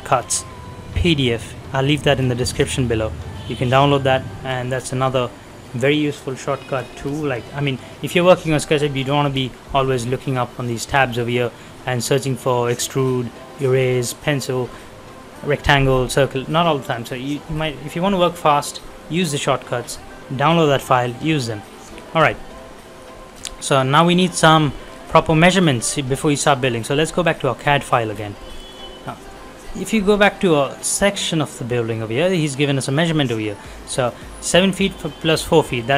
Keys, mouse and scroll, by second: 17.0 shift+middle click, 17.4 scroll down 1, 18.1 middle click, 20.9 shift+middle click, 21.3 scroll up 1, 21.5 middle click, 22.0 shift+middle click, 22.3 scroll up 1, 22.5 middle click, 23.5-24.1 scroll down 1, 24.1 middle click, 24.7 shift+middle click, 25.0-25.3 shift+scroll down 2, 25.3 middle click, 25.7 shift+middle click, 26.1-27.3 scroll up 1, 27.3 click, 28.1-28.8 scroll down 2, 28.4 middle click, 29.0 scroll up 1, 29.6 middle click, 29.9 scroll down 1, 30.2 middle click, 31.9-32.3 scroll up 1, 32.3 middle click, 32.6 scroll down 1, 33.7-34.0 scroll up 1, 34.0 middle click, 35.5-35.8 scroll down 1, 35.8 middle click.